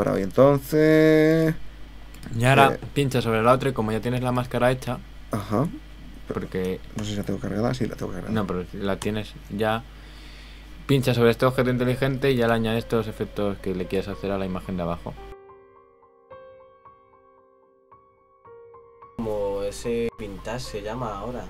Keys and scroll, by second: 7.0 super+h.